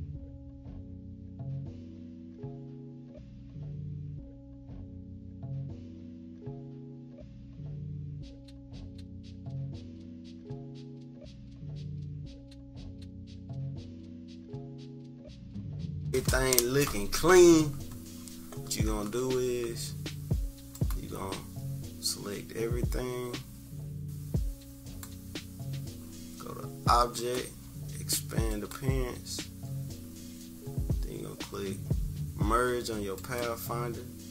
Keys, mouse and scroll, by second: 0.0 -, 0.2 =, 0.5 right click, 0.9 -, 1.2 =, 1.4-1.8 scroll up 2, 1.8 click, 2.1 click, 2.5-4.4 typing, 2.9 click, 3.6-4.4 scroll down 3, 3.8 click, 3.8 right click, 4.4 scroll up 1, 5.0 click, 6.2 click, 6.8 click, 7.1 click, 7.7 click, 9.6 click, 9.7 click, 10.1-11.2 typing, 10.1 click, 10.6 click, 11.0 click, 11.9 click, 12.5 -, 12.8 click, 12.9 click, 13.2 click, 13.4-13.7 scroll up 2, 13.7-15.8 typing, 13.8 scroll down 1, 14.1 click, 14.7 scroll down 1, 14.9 click, 15.2 scroll up 1, 15.7 click, 20.7 click, 22.0 click, 27.1-31.2 drag, 33.1 click.